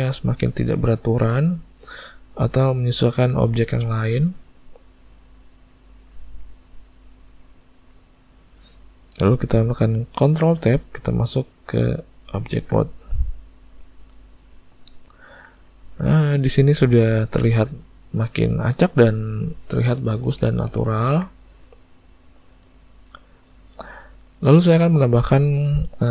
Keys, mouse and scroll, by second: 0.5 click, 0.9 click, 1.2 click, 2.5 click, 3.2 click, 3.7 click, 4.1 click, 4.5 click, 5.9 click, 6.2 click, 6.5 click, 6.9 click, 7.1 click, 7.4 click, 8.0 click, 10.6 ctrl+Tab, 15.3 Tab, 15.8 Tab, 16.3 alt+a, 17.1 middle click, 20.5 shift+middle click, 20.9 ctrl+middle click, 21.3 middle click.